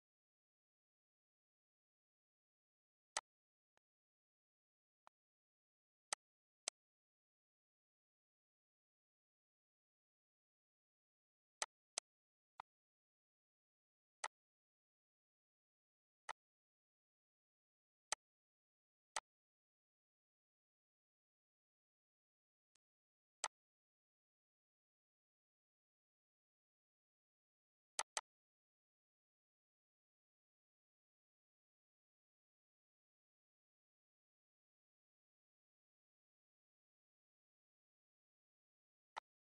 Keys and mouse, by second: 2.9 click, 3.5 click, 4.8 click, 5.9 click, 11.4 click, 12.3 click, 13.9 click, 16.0 click, 17.8 click, 18.9 click, 22.5 click, 22.9 z, 23.2 click, 27.7 click, 38.8 click, 39.4 click.